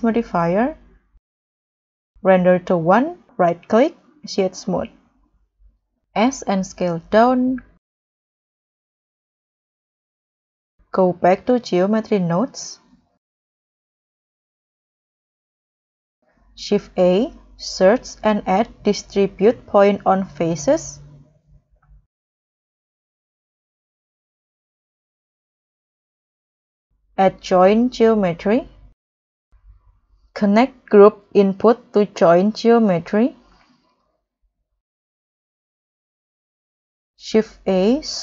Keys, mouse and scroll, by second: 0.3 scroll down 4, 0.6 middle click, 0.8 middle click, 1.2 scroll down 5, 1.7 scroll up 1, 1.8 middle click, 2.9 middle click, 3.3 right click, 4.4 scroll down 1, 4.7 middle click, 6.0 m, 6.1 s, 7.4-8.2 scroll up 9, 9.1-9.5 scroll down 8, 9.7 scroll up 1, 10.4 scroll down 4, 10.8-11.2 scroll up 4, 11.2-12.0 scroll down 13, 12.4 scroll down 1, 12.9-15.0 scroll up 4, 15.5-16.4 scroll up 1, 16.5 shift+a, 18.6 typing, 19.8-21.6 typing, 24.4-24.7 scroll down 4, 24.7-25.1 scroll up 4, 26.9 scroll up 1, 27.0-28.3 typing, 32.9-33.4 scroll down 8, 33.4-33.7 scroll up 6, 35.1 scroll up 2, 35.8-36.1 scroll down 3, 36.2-36.9 scroll up 4, 37.4 scroll up 1, 37.5 shift+a.